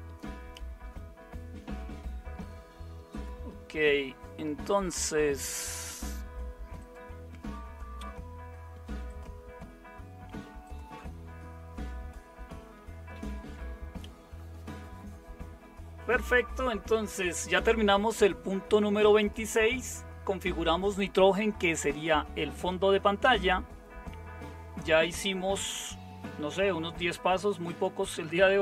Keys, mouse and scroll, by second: 0.0-28.6 typing, 13.1 super+7.